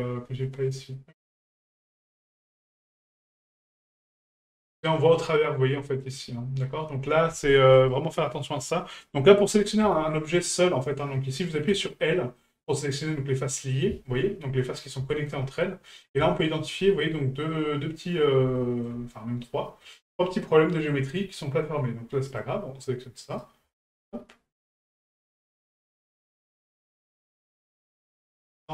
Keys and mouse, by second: 1.8-4.4 middle drag, 7.7 right click, 12.4-13.6 middle drag, 15.1 shift+middle drag, 16.3-16.6 shift+middle drag, 17.0-17.5 middle drag, 18.6 shift+middle click, 19.9 middle click, 22.3 click, 23.3 right click, 23.9 shift+right click, 24.6 shift+right click, 25.6 shift+right click.